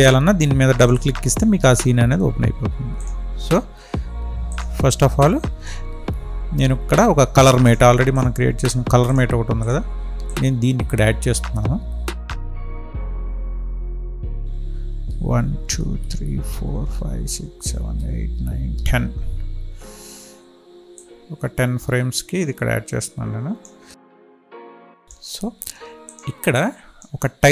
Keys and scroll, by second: 13.8 Right, 15.0 Right.